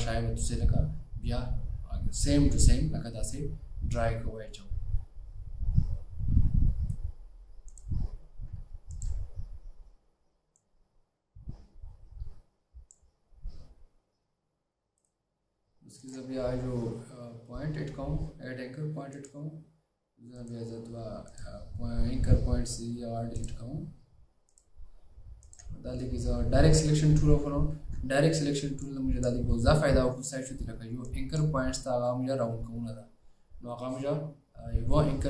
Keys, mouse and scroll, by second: 9.0 ctrl+click, 15.1 right click, 20.5 right click, 27.9-28.2 alt+scroll up 2.